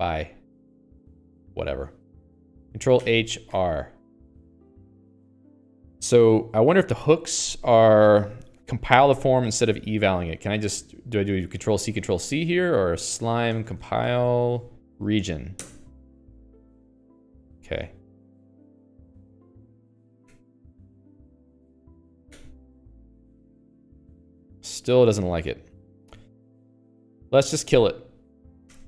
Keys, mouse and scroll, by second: 9.9 ctrl+g, 10.2 Escape, 10.4 Escape, 10.7-15.1 typing, 13.0 alt+x, 15.3 Down, 15.5 Down, 18.2 Escape.